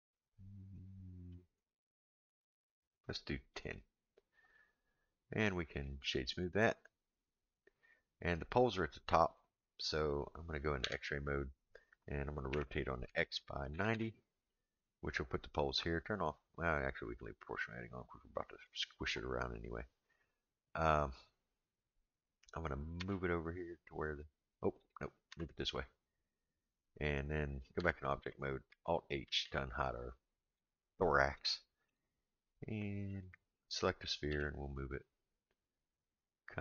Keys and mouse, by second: 1.4-3.6 drag, 5.7 right click, 10.8 Tab, 12.5 r, 23.0 g, 25.3 g, 27.8 Tab, 29.2 alt+h, 31.4-31.9 shift+middle drag, 33.1 click, 34.3 g.